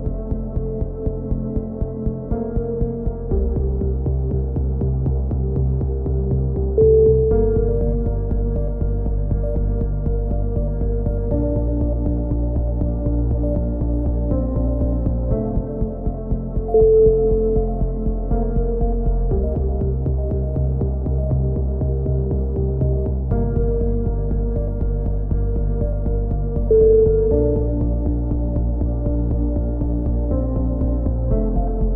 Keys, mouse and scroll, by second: 0.2-2.3 drag, 2.3 middle click, 2.6-4.3 drag, 4.3 shift+q, 5.8 shift+q, 6.8 z, 7.1 z, 7.3 a, 8.5 x, 10.4 x, 11.4 middle click, 12.8 middle click, 13.7 f, 14.2 middle click, 14.6-17.4 right drag, 16.9 f, 17.6-18.6 right drag, 18.2 f, 18.4 a, 18.6 middle click, 19.3 click, 19.7 Tab, 21.2-22.3 middle drag, 24.1-25.9 middle drag, 24.3 Tab, 26.9 right click, 27.3 x, 28.5-29.6 middle drag, 29.4 ctrl+KP_7, 29.8 z, 30.3 z, 30.7 click.